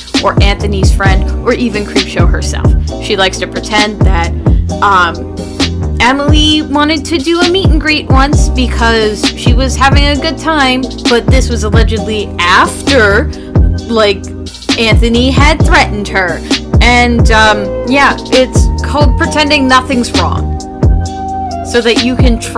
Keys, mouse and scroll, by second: 6.7 space, 7.6 space, 7.8 right click, 8.0 right click, 8.6 [, 14.8 space, 15.1 space.